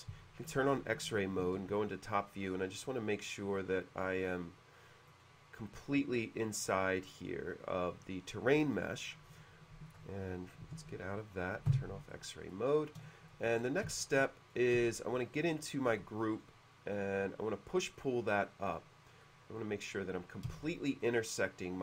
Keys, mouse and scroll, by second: 0.6 F3, 0.6 w, 1.4 alt+1, 1.4 F3, 1.4 w, 2.9 click, 5.2 click, 9.9 alt+F3, 11.8 F3, 12.2 middle click, 13.2 shift+middle click, 13.7 scroll up 1, 14.0 shift+middle click, 14.9 space, 15.3 click, 15.5 click, 16.0 s, 16.4 click, 18.1 click, 18.6 middle click, 19.4 click, 19.9-20.4 middle drag, 20.6 space, 21.1-21.8 middle drag.